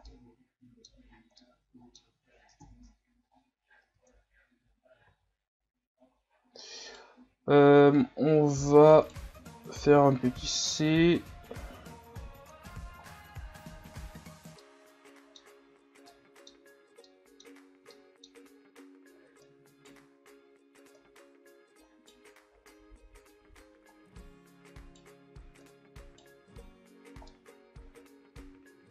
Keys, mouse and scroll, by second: 0.1-2.6 middle drag, 2.6 KP_1, 3.3-3.9 scroll up 5, 3.9 Tab, 4.2 scroll up 3, 5.1 z, 6.5-6.9 scroll up 1, 6.9 right click, 7.2 c, 9.5-12.6 drag, 12.8 z, 13.1-13.5 scroll down 3, 13.5 Tab, 14.1 scroll down 6, 14.6-15.5 middle drag, 15.5-16.1 scroll up 3, 16.1-17.5 middle drag, 17.5-17.9 scroll up 1, 17.9-18.4 middle drag, 18.4 Tab, 19.4 right click, 21.0 right click, 22.7 right click, 25.7 right click, 26.4 Tab, 27.0 scroll down 2, 27.3-28.9 middle drag.